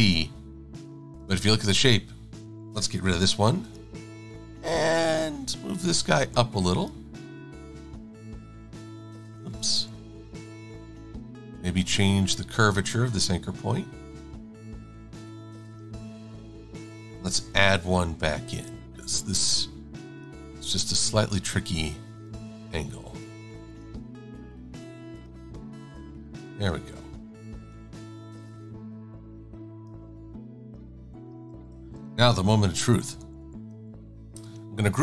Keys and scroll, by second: 3.2 -, 9.6 super+-, 19.0 a.